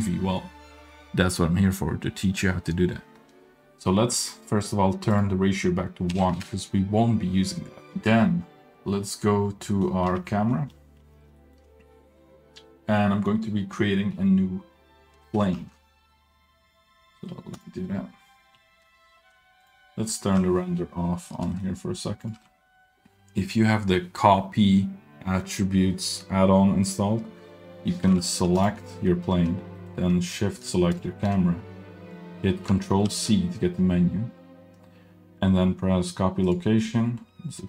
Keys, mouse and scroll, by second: 5.1-7.9 drag, 7.9-9.7 middle drag, 7.9-9.7 scroll down 2, 10.1 KP_Decimal, 10.5 middle click, 10.8 scroll up 1, 11.0 middle click, 11.4 shift+middle drag, 12.1-12.4 scroll up 2, 15.5 shift+a, 18.4 scroll down 2, 19.6 click, 20.6 z, 21.5 shift+middle drag, 22.2 click, 22.3 z, 23.0 shift+middle click, 23.0-23.5 scroll up 1, 23.0 g, 28.5 click, 29.7 middle click, 30.9 shift+click, 33.0 ctrl+c.